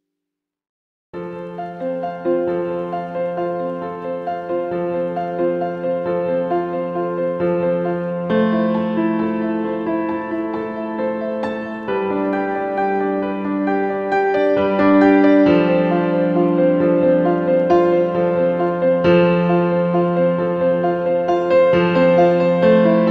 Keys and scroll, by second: 1.3 ctrl+a, 21.2 ctrl+c.